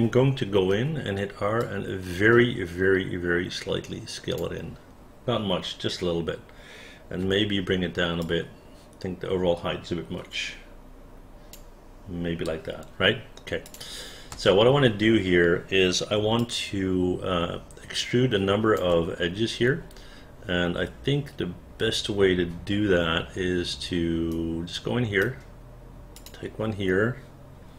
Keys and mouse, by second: 0.8 r, 1.7-4.5 drag, 7.4 w, 13.7 click, 14.4 space, 16.5-18.9 alt+drag, 24.4 right click, 26.3 click.